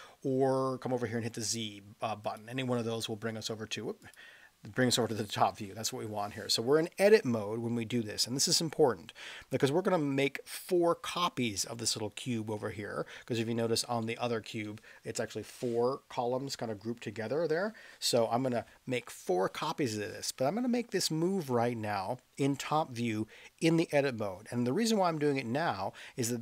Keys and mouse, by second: 14.0-14.5 middle drag, 18.2 KP_7.